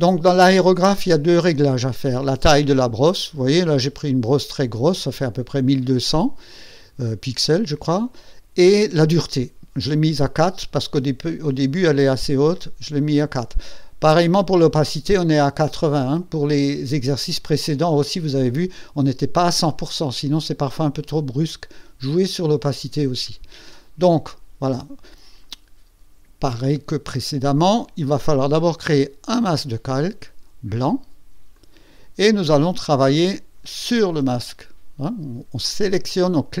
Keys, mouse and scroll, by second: 27.1 click, 27.7 right click, 29.3 click, 31.5 click, 33.0 click, 36.5 click.